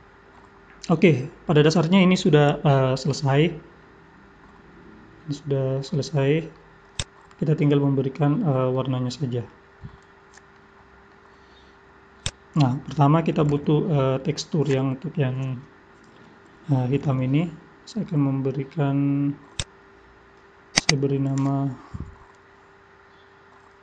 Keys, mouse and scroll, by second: 0.0 scroll up 2, 0.4 middle click, 6.9 click, 7.6 middle click, 10.5 middle click, 12.2 click, 19.5 click, 20.8 click.